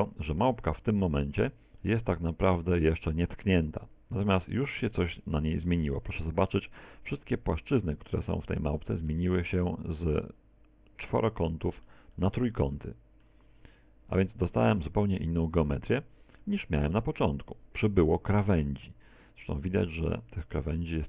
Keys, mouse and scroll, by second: 0.8 middle click, 1.9 middle click, 4.0 z, 5.2-6.0 scroll up 5, 6.1-8.0 scroll up 3, 8.8 middle click, 12.2 middle click.